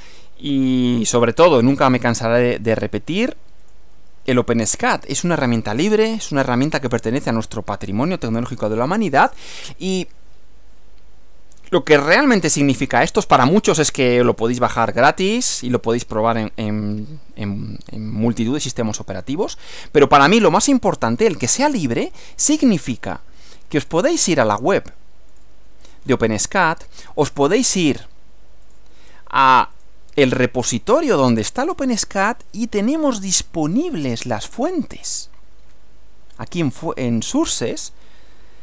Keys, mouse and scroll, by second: 1.2 click, 2.7 click, 3.7 click, 4.9-7.1 drag, 23.9 click, 25.3 click, 27.4-28.7 right drag, 28.7 click, 29.7 click, 31.7-32.5 scroll down 2, 35.0-35.3 scroll down 2, 36.4 click.